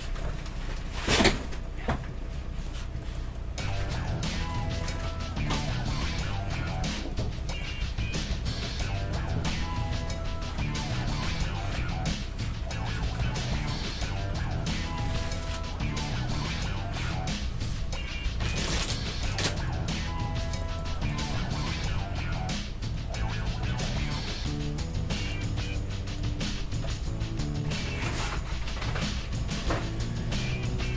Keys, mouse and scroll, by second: 1.0 g, 2.3 g, 3.0-11.0 middle drag, 4.5-7.0 right drag, 6.0 g, 7.1-8.9 right drag, 7.8 g, 12.1 KP_1, 12.9 middle click, 13.7-15.6 right drag, 14.3 g, 17.2-19.5 right drag, 18.4 g, 20.1-25.2 right drag, 20.6-23.3 middle drag, 22.0 g, 23.9 g, 25.2-26.9 middle drag, 25.6-27.4 right drag, 25.8 g, 28.9-30.9 drag, 29.3-30.9 middle drag, 29.6-30.9 right drag, 30.5 g.